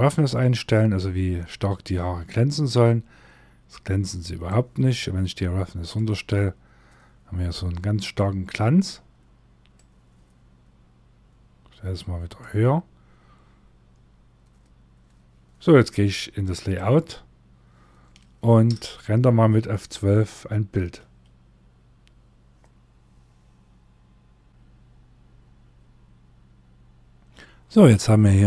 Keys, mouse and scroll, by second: 16.1 click, 20.6 F12, 22.8-23.5 scroll down 3, 24.5-25.0 scroll down 1.